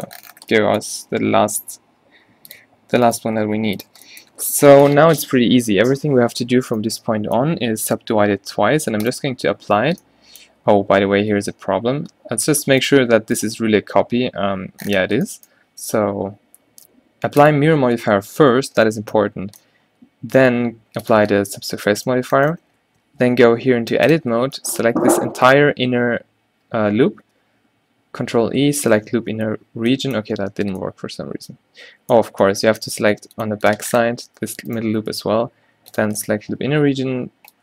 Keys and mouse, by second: 0.5 drag, 1.1 g, 3.5 g, 4.1 Tab, 5.2 a, 9.1-10.1 drag, 11.2 ctrl+z, 11.8 1, 12.7 2, 13.1 g, 18.0-22.5 middle drag, 22.6 middle click, 23.2 Tab, 23.6 z, 24.3 z, 25.1 a, 27.2 ctrl+e, 29.3 x, 30.0-30.7 drag, 30.7 ctrl+z, 31.1-32.5 middle drag, 35.3 ctrl+e, 36.8 x.